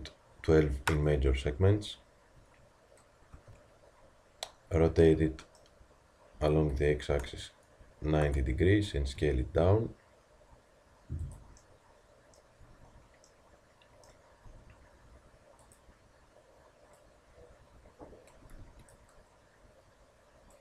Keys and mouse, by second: 3.3 t, 6.3 r, 9.2 s, 13.4-16.9 middle drag, 14.4 s, 16.9-17.9 drag.